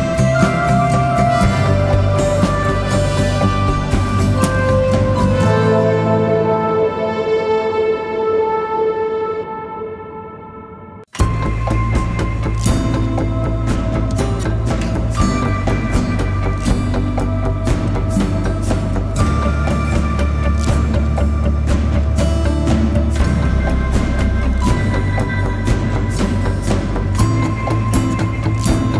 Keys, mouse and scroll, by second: 3.8-6.4 scroll down 1.